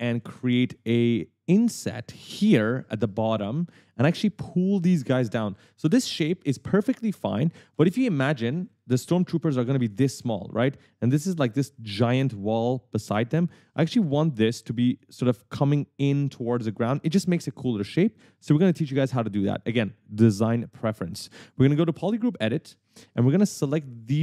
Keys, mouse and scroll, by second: 2.9 right click, 3.9 right click, 7.9 right click, 8.0 w, 8.8 q, 10.4-10.8 scroll up 1, 10.9 w, 11.3 d, 11.8 w, 11.9 scroll down 1, 14.0 scroll up 1, 16.8 right click, 18.2-18.7 scroll up 1, 22.2 click, 22.8 right click, 23.7-24.1 scroll up 1.